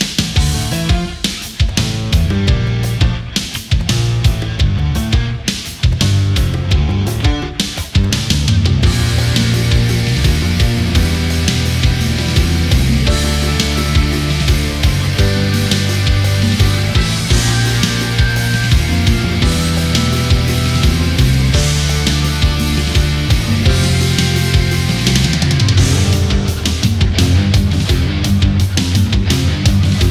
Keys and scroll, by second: 6.0 space.